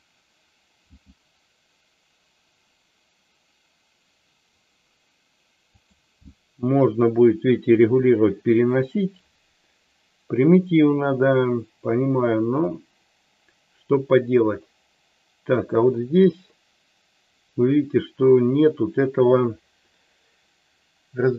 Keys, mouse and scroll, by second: 0.8 g, 5.7 click.